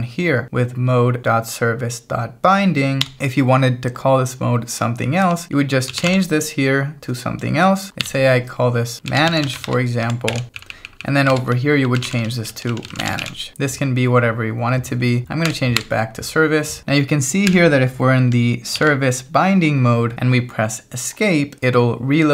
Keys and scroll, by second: 3.0 Escape, 5.3-6.5 typing, 5.4 Escape, 8.0-13.8 typing, 15.5 u, 17.5 j, 18.8 shift+v.